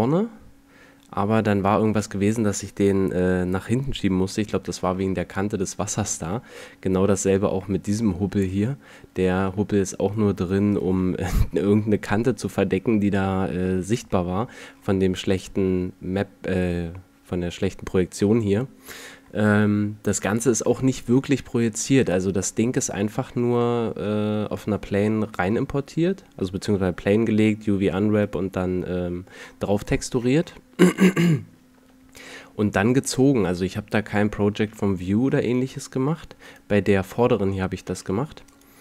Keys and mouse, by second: 4.1-4.8 middle drag, 5.5-5.9 middle drag, 7.1-7.6 middle drag, 9.0 right click, 9.3 Tab, 12.7 a, 13.1 Tab, 21.7 right click, 22.5 middle click, 34.3 middle click, 37.7 g.